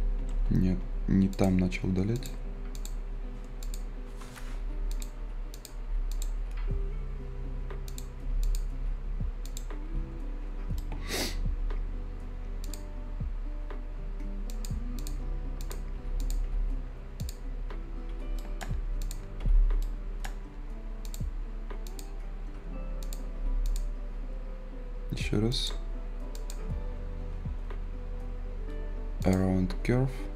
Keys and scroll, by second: 1.0 z, 12.0 Delete.